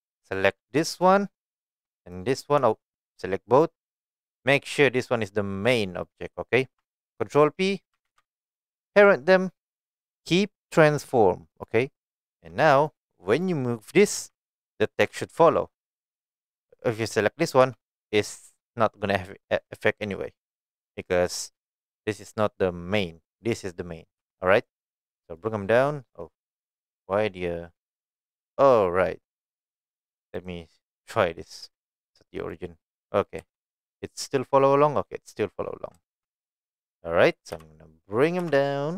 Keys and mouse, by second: 0.3 drag, 0.8 click, 3.0 shift+click, 4.1 shift+click, 4.8 shift+click, 8.0 ctrl+p, 14.1 g, 16.0 right click, 16.8 click, 17.6 g, 20.8 right click, 23.5 click, 24.2 g, 24.6 right click, 25.2 shift+middle click, 26.1-28.1 middle drag, 29.1 middle drag, 29.7 middle click, 30.5-32.5 right drag, 33.4 g, 34.5 middle click, 36.5 right click, 37.5 KP_1, 38.4 KP_3.